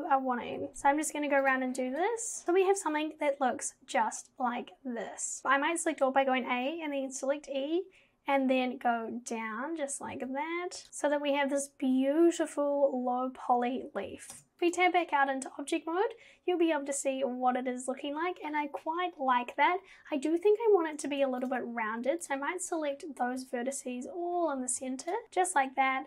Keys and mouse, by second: 0.6 g, 0.7 click, 0.7 v, 1.9 click, 2.4 g, 5.4 a, 5.4 e, 10.9 z, 14.4 Tab, 21.1 Tab, 25.1 alt+shift+click.